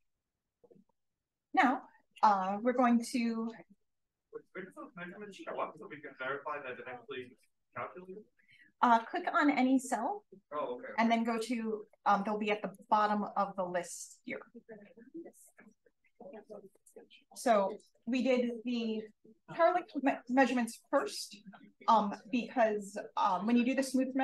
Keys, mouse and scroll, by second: 3.5 click, 4.0 d, 8.0 click, 8.7 click, 12.7-16.8 drag, 13.1-13.6 scroll up 2, 14.3-14.8 scroll up 4, 17.6 click, 17.8 click.